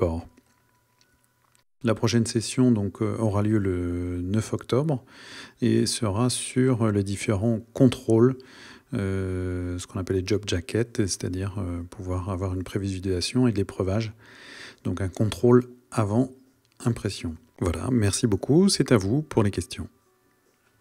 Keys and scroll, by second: 0.5 Right, 17.3 Right.